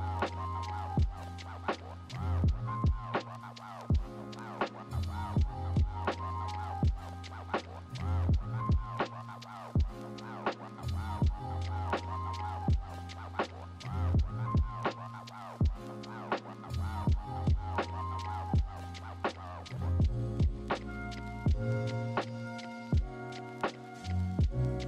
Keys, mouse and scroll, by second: 17.7 ctrl+-, 19.0 ctrl+=.